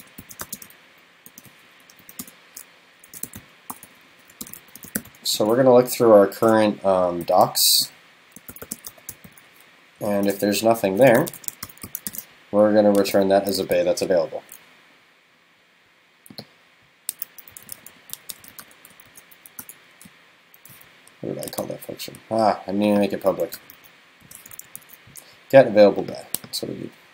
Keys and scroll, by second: 12.1 super+s, 24.8 super+s.